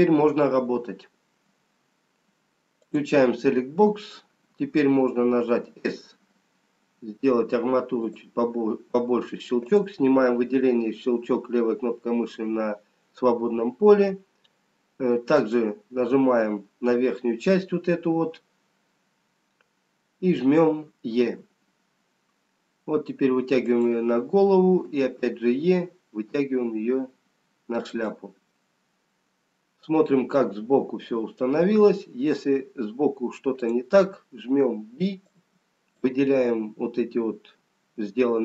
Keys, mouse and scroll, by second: 3.1 click, 5.5 s, 10.0 click, 15.5 click, 17.3 scroll up 5, 19.5-20.8 scroll down 5, 20.8-21.8 scroll down 1, 21.8 e, 24.8 e, 28.5 middle click, 33.6 click, 34.5 b.